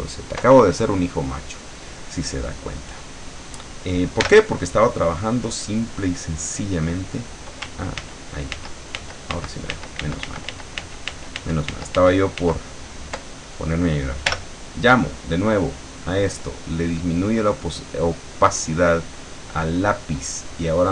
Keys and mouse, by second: 4.3 l, 6.5 click, 8.0 ctrl+z, 14.3 l, 16.4 click, 17.5-20.0 drag, 20.8 click.